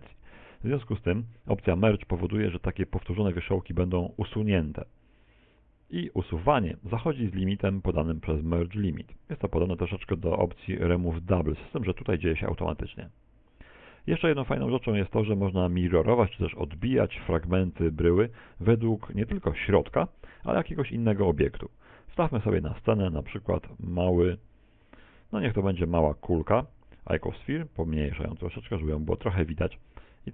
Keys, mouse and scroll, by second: 5.5 scroll down 1, 14.3 a, 14.9-15.8 scroll down 2, 15.4 shift+middle click, 16.0 middle click, 16.8 middle click, 17.8 middle click, 18.6 middle click, 20.8 Tab, 22.3 shift+a, 27.2 s, 28.9 click.